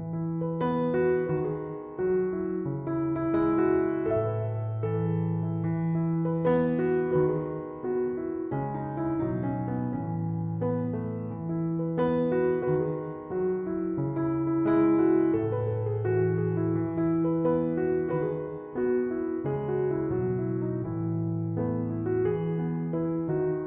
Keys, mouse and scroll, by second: 12.7 5, 13.1 Return.